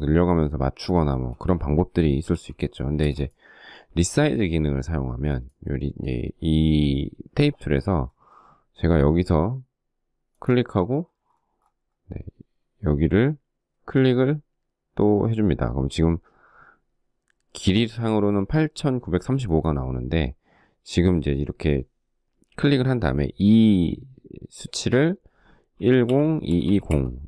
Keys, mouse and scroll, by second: 0.4 space, 1.6 e, 2.3 space, 24.8-26.7 typing.